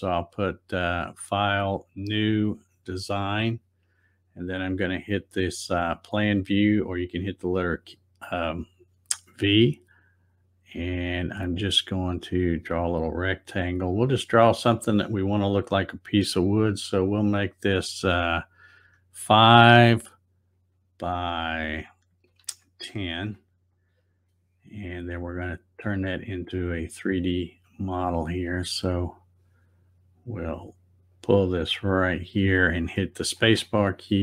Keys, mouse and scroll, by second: 0.3 click, 2.6 click, 6.5 click, 12.4 click, 14.0-17.0 drag, 20.6 Tab, 26.1 click, 29.1 click, 31.2-33.7 drag, 33.4 space.